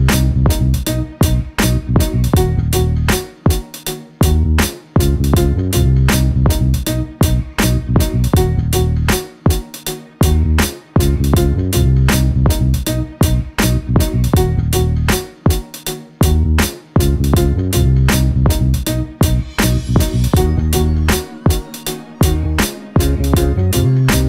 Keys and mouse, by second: 1.8 click, 3.0 click, 4.6-5.2 middle drag, 6.1-11.0 drag, 12.7 click, 13.4 click, 15.3 click, 15.4 click, 15.6 click, 15.9 click, 16.2 click, 16.6 click, 16.8 click, 18.2 click, 19.5 click, 21.2 click, 22.2-23.5 middle drag.